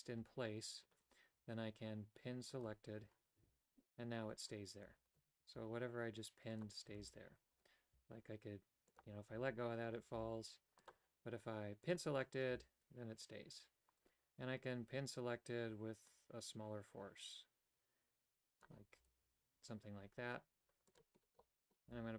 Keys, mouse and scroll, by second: 2.5 click, 3.5 a, 5.4 g, 7.0 a, 8.0 g, 9.3 a, 10.2 g, 11.8 click, 12.6 a, 16.1-18.7 drag, 19.0 g, 21.4 middle click, 21.9 g.